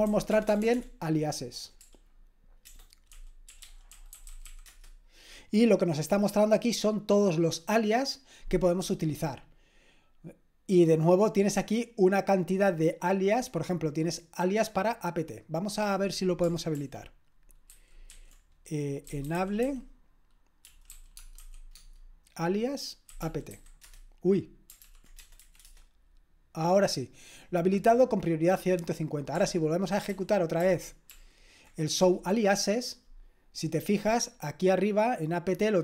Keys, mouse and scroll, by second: 0.0-0.6 typing, 1.8 typing, 2.9-5.0 typing, 15.5 click, 16.8 ctrl+p, 17.8 ctrl+w, 18.1 ctrl+w, 18.9-21.4 typing, 21.7 Tab, 22.8-24.0 typing, 24.8 ctrl+p, 25.2-25.9 typing, 30.1 ctrl+p, 30.6 ctrl+p, 31.1 ctrl+p, 32.0 Return.